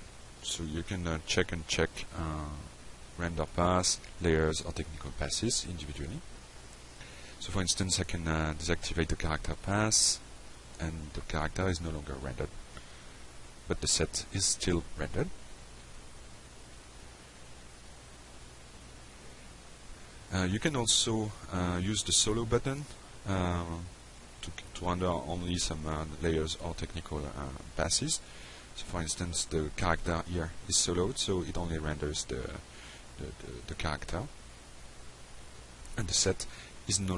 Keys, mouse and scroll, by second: 0.4 click, 1.0 click, 1.4 click, 2.1 click, 2.8 drag, 4.8 click, 5.4 click, 6.1 F5, 9.2 click, 9.5 click, 10.1 click, 11.9 click, 15.1 click, 15.6 click, 17.0 click, 18.7 click, 22.4 click, 30.8 click, 32.4 click, 32.6 F5, 34.8 click, 35.6 click, 36.4 click.